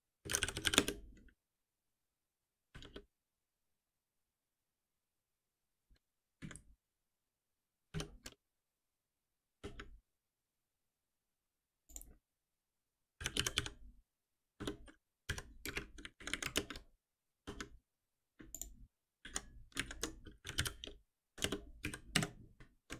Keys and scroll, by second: 2.8 alt+Return, 7.9 alt+F7, 17.1 alt+Return, 18.6 ctrl+b, 21.9 Return, 22.1 Escape.